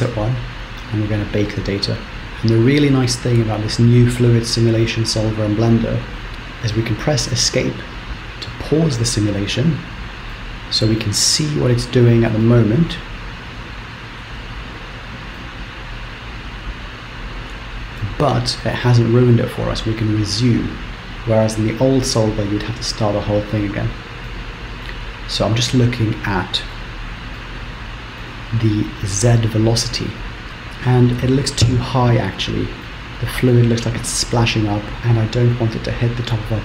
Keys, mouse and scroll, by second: 0.6 click, 8.5 Escape, 10.3 middle click, 11.2-11.6 scroll up 2, 11.9 shift+Left, 12.4 shift+middle click, 13.8 shift+Left, 14.0-15.0 Right, 15.2 Right, 15.4 middle click, 24.2 shift+middle click, 25.7 shift+middle click, 27.3 middle click, 29.5 shift+Left, 29.8 Right, 29.8-30.4 Right, 31.2-32.7 scroll down 2, 32.7-33.1 scroll down 1, 33.1 middle click.